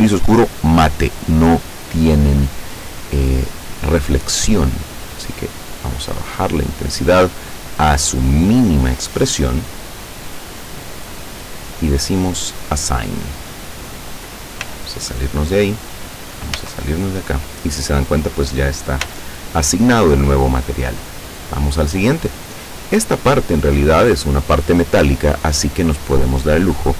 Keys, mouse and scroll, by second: 5.1-7.3 drag, 12.5 click, 14.7 z, 16.6 a, 19.1 z, 21.9 right click.